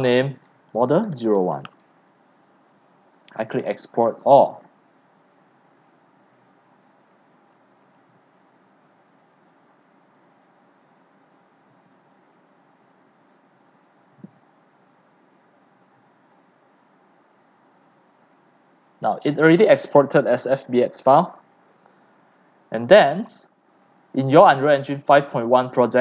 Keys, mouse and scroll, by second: 0.0 click, 0.5-2.0 typing, 3.4-22.2 drag.